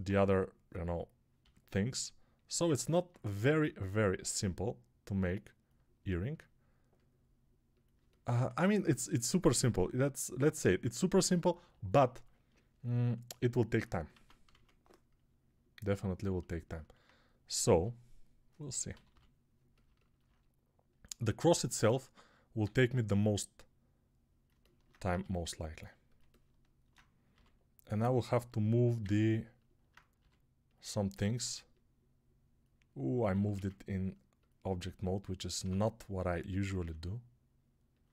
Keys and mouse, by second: 1.3-2.3 drag, 1.3 g, 2.3-4.3 alt+middle drag, 4.3-18.8 drag, 14.0 ctrl+Tab, 14.4 shift+a, 17.5 s, 18.8-21.8 middle drag, 18.8 g, 21.8-24.4 drag, 22.5 s, 24.4-33.1 alt+middle drag, 25.0 g, 27.2 g, 30.0 g, 33.1-37.9 ctrl+drag, 33.4 ctrl+a, 35.5 Tab, 36.6 s, 37.9-38.1 alt+middle drag.